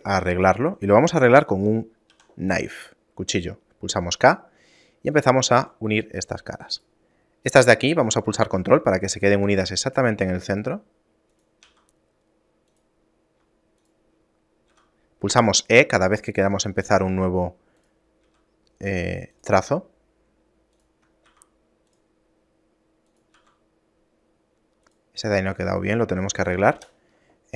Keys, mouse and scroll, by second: 2.2 k, 15.1 middle click.